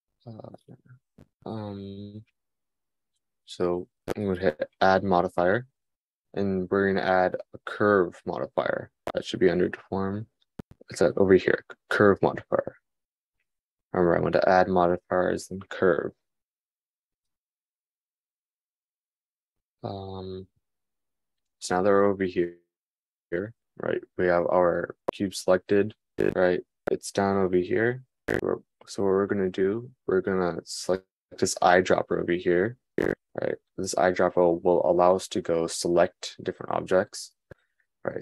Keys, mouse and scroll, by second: 5.3-38.2 drag.